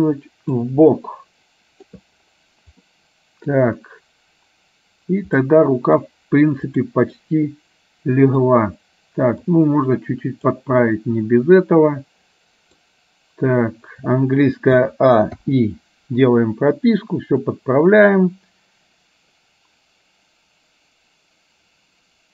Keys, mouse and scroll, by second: 1.0-1.8 scroll up 1, 1.8 scroll up 1, 2.9 middle click, 5.4-6.1 scroll up 1, 6.8 click, 7.2-8.4 middle drag, 9.4-10.7 drag, 10.9-12.8 middle drag, 14.9 a, 15.6 i, 17.1-22.3 drag.